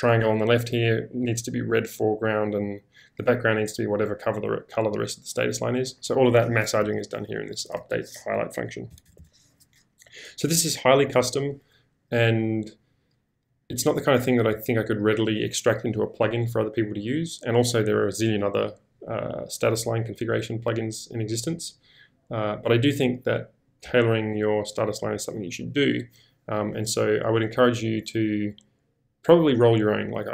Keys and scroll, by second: 6.8 j, 7.4 k, 7.7 shift+v, 8.9 Escape, 9.0 Escape, 9.1 Escape.